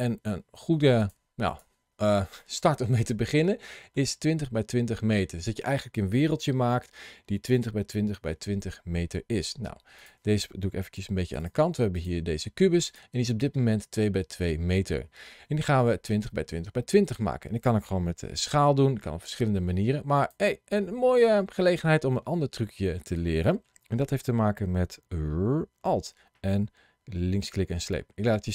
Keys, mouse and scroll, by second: 0.8 click, 1.3 click, 2.2 middle click, 9.8 click, 10.8 g, 11.2 click, 11.8 click, 12.0 g, 12.7 click, 18.0 s, 20.0 click, 20.6 middle click.